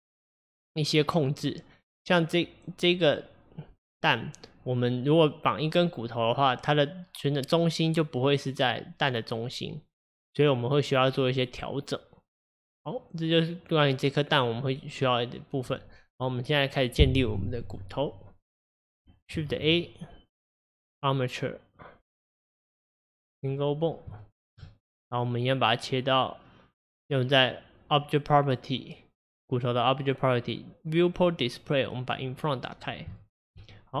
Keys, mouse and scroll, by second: 19.5 shift+a, 24.2-24.6 shift+middle drag, 24.6-26.0 scroll up 1, 32.1 click, 32.8 scroll up 3, 33.2-34.0 shift+middle drag.